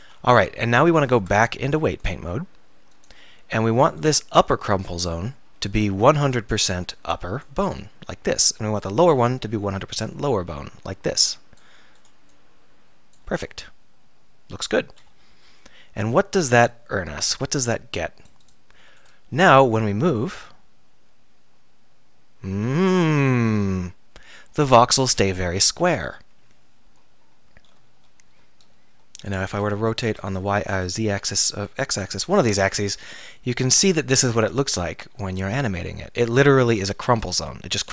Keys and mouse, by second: 0.5 KP_1, 0.8 KP_3, 1.2 Tab, 3.1 Tab, 7.7-13.6 drag, 13.6-14.4 middle drag, 15.1 KP_1, 15.4 KP_3, 20.1 r, 21.0-23.1 drag, 25.3-29.7 middle drag, 29.7 r, 31.7-33.1 drag.